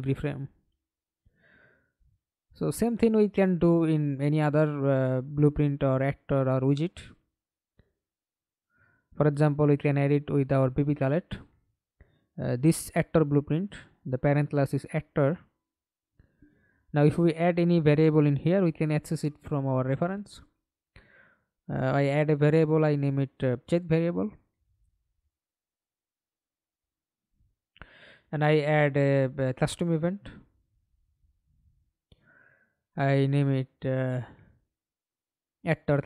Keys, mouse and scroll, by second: 0.2 scroll down 2, 4.3 right click, 4.7 right click, 5.2 right click, 6.0 right click, 6.8 right click, 7.3 right click, 15.0 right click, 19.9-24.4 typing, 25.9 right click, 26.6 right click, 27.1-28.1 typing, 32.2-36.0 typing.